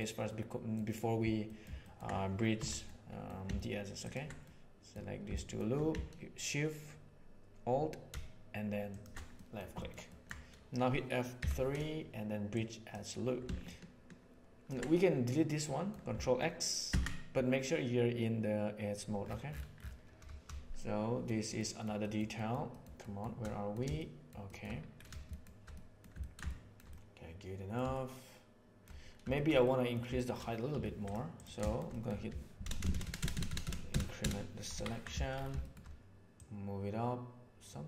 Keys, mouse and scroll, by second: 0.1 middle click, 1.5 middle click, 1.7 ctrl+middle click, 2.5 2, 2.8 middle click, 4.4 middle click, 5.2 shift+middle click, 9.3 middle click, 10.0 ctrl+middle click, 11.3 F3, 13.6-14.6 drag, 15.6 middle click, 16.8 ctrl+x, 20.7 shift+middle click, 21.5 shift+middle click, 21.9 shift+middle click, 22.3 shift+middle click, 22.9 shift+middle click, 23.4 middle click, 23.9 shift+middle click, 24.4 shift+middle click, 25.7 middle click, 26.1 ctrl+middle click, 26.4 shift+middle click, 26.9 middle click, 27.9 shift+middle click, 29.3 shift+middle click, 29.6 middle click, 30.1 shift+middle click, 30.7 3, 31.3 middle click, 31.5 shift+middle click, 31.9 middle click, 32.6 ctrl+KP_Add, 32.7 ctrl+KP_Add, 32.8 ctrl+KP_Add, 33.0 ctrl+KP_Add, 33.1 ctrl+KP_Add, 33.3 ctrl+KP_Add, 33.4 ctrl+KP_Add, 33.6 ctrl+KP_Add, 33.8 ctrl+KP_Add, 34.1 ctrl+KP_Add, 34.7 ctrl+KP_Subtract, 35.6 shift+middle click, 36.4-37.8 drag.